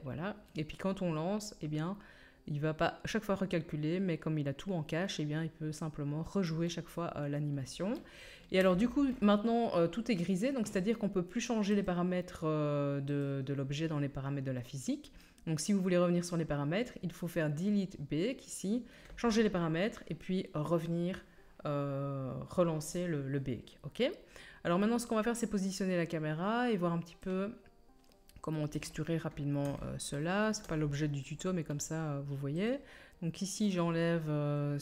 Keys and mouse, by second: 2.1-5.3 middle drag, 8.6 space, 24.7-26.3 middle drag, 27.8 middle click, 28.0 middle drag, 28.2-32.7 middle drag, 32.7-33.5 drag, 33.5 middle click, 33.7-34.8 drag.